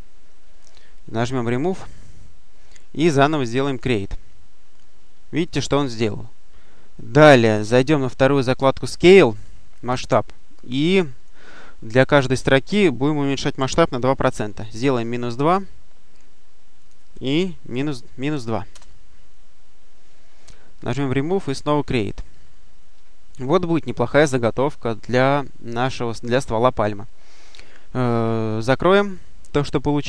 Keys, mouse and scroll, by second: 1.1 click, 3.6 click, 4.7-5.3 scroll up 1, 8.7 click, 10.4 click, 13.5 -, 14.7 2, 15.1 Return, 16.7 click, 17.8-18.7 typing, 20.7 click, 21.5 click, 28.8 click, 29.4 click.